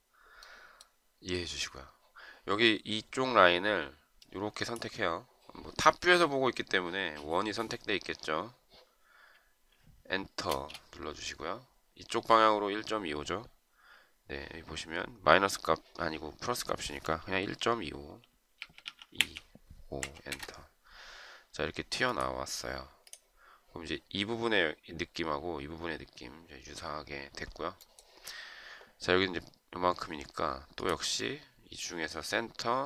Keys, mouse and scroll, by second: 10.5 space, 18.4-19.8 typing, 20.3 Return.